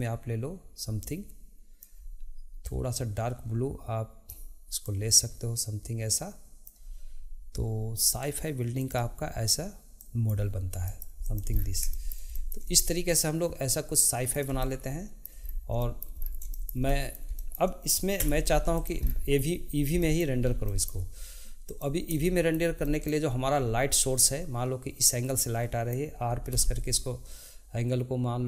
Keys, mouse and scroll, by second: 8.8 click, 10.8 middle click, 11.2 click, 11.5-11.9 scroll down 1, 11.9-15.4 shift+middle drag, 15.4-15.8 scroll down 1, 15.8 shift+middle click, 16.2-16.5 scroll down 2, 16.5-18.2 shift+middle drag, 18.2 Tab, 18.7 drag, 19.1-19.7 scroll down 2, 19.7-20.5 scroll up 3, 20.0-20.4 middle drag, 20.7-21.6 shift+middle drag, 21.6 click, 22.2-26.5 shift+middle drag, 26.5 r.